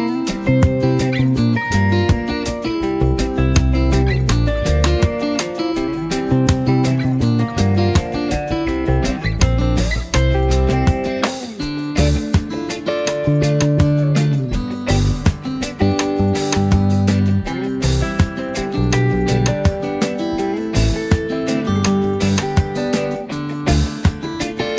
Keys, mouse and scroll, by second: 7.9 right click, 13.6 click, 15.0 z, 15.3 click, 15.4 space, 15.7 click, 16.2 space, 16.4 click, 16.8 v, 17.1-18.2 drag, 21.2 shift+Up, 23.0 click, 23.3 space, 23.5 click, 23.9 z, 24.2 click, 24.4 space, 24.4 click.